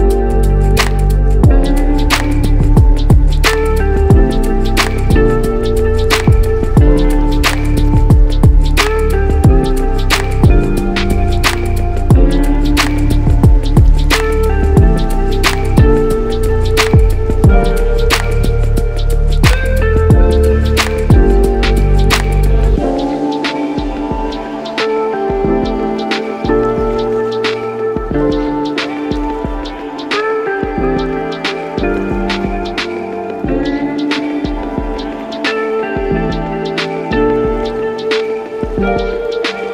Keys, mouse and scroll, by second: 3.6 click, 5.7 c, 5.9 c, 9.1 Escape, 10.9 Delete, 10.9 Delete, 15.7 a, 15.7 a, 16.3 8, 17.9 KP_Subtract, 17.9 -, 21.4-37.2 drag, 35.8 Return.